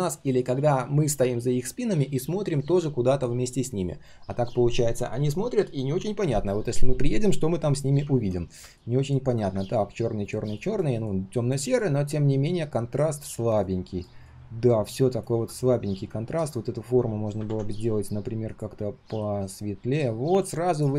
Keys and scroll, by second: 17.4 ctrl+\.